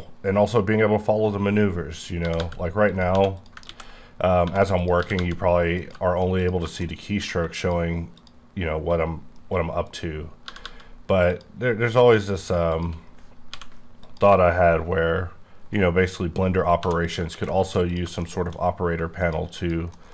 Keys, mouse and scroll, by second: 2.3 g, 2.4 g, 2.9 click, 3.1 2, 3.3 click, 3.6 ctrl+x, 4.4 1, 4.8 click, 5.0 g, 5.2 g, 5.8 click, 6.4 click, 6.8 shift+middle click, 7.6 shift+click, 8.2 shift+click, 9.9 click, 10.4 g, 10.6 g, 11.4 click, 12.2 click, 12.7 shift+click, 13.5 m, 14.0 click, 16.9 2, 17.0 click, 17.3 x, 17.9 click, 18.2 shift+middle click, 19.2 shift+click, 19.9 shift+middle click.